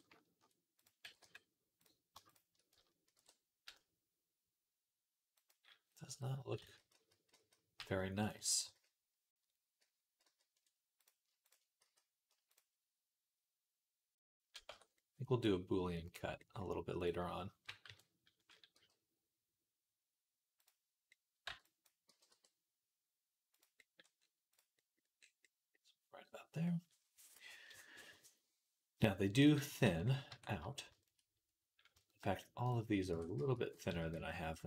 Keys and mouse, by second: 0.3 ctrl+z, 0.9 g, 2.1 shift+click, 3.0 ctrl+b, 6.4 ctrl+z, 6.7-10.5 ctrl+z, 11.7 x, 14.5 Tab, 14.8 click, 15.3-16.8 middle drag, 16.8 click, 16.9-20.4 middle drag, 17.7 KP_3, 18.6 g, 20.4-24.4 drag, 21.3 b, 21.9 g, 24.4-27.9 middle drag, 27.9-30.7 drag, 29.7 Tab, 30.1 Tab, 30.7-34.6 shift+middle drag, 33.0 Tab, 33.2 a, 33.7 s.